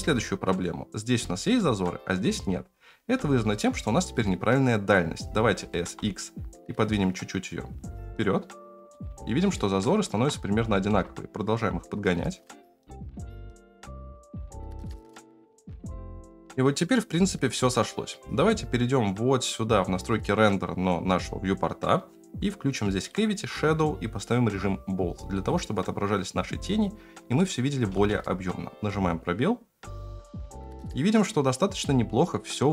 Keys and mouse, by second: 5.6 s, 9.8 shift+middle drag, 10.6 s, 13.2 shift+middle click, 13.3-15.5 typing, 19.8-25.9 right drag, 27.4 shift+middle click, 27.9 space.